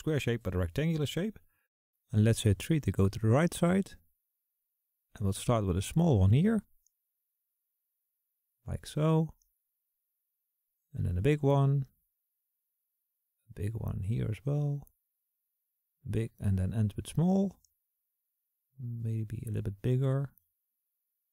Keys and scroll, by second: 0.5 KP_1, 0.8 KP_3.